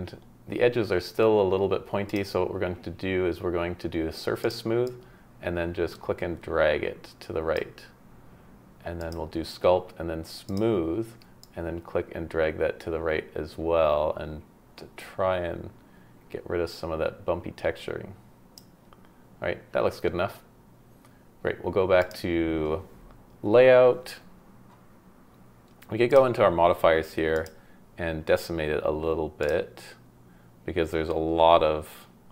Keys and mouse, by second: 22.0-24.8 drag, 27.3-29.4 drag.